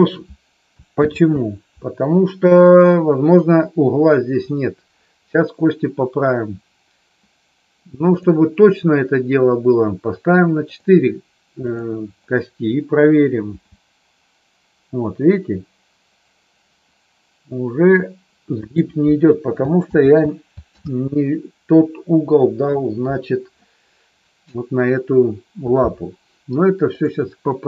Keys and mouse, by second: 0.9 ctrl+z, 8.1 click, 10.6 click, 11.6 click, 13.4 g, 18.6 click, 19.8 ctrl+z, 26.8 click, 27.4 middle click.